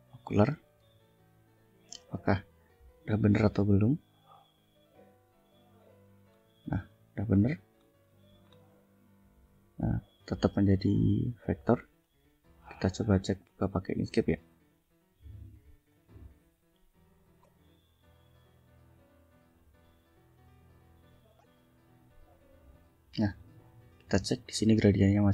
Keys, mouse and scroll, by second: 0.1 click, 6.9-7.3 ctrl+scroll down 2, 7.7 ctrl+scroll up 2, 8.4 ctrl+scroll up 2, 11.9 click, 12.5 click, 13.0 click, 13.2 right click, 15.8 click, 18.1 click, 23.3 ctrl+click, 24.0 ctrl+scroll down 2.